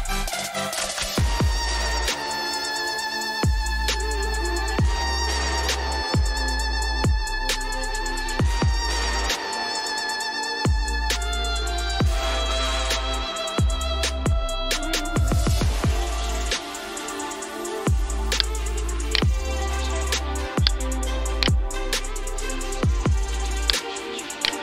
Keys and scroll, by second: 0.5 alt+Tab, 3.4 Right, 4.7 Up, 6.8 Down, 7.5 Right, 8.4 Down, 10.3 Up, 13.0 Down, 14.7 Up.